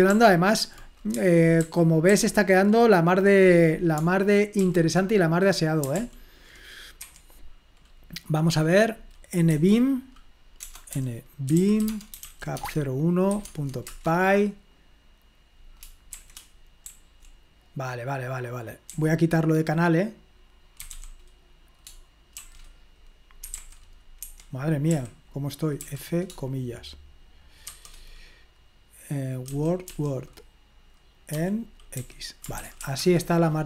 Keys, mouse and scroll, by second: 0.2 ctrl+p, 1.6 super+h, 2.1 super+h, 4.6 super+l, 6.0 super+p, 7.0 Escape, 9.5 v, 10.6-13.5 typing, 13.5 Tab, 13.9 Return, 16.7-17.4 typing, 19.0 j, 20.8 c, 23.5 Escape, 24.2 Escape, 24.9-25.8 typing, 29.5-29.8 typing, 31.3-33.3 typing.